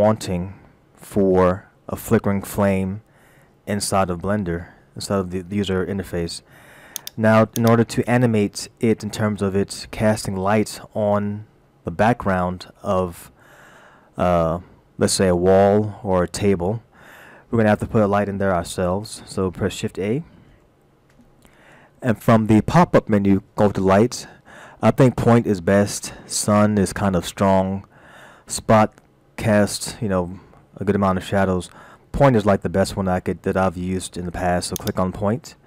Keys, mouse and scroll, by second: 7.0 click, 7.5 click, 10.2-10.6 scroll down 1, 13.7-14.0 scroll down 1, 15.5 scroll up 1, 20.5 shift+a.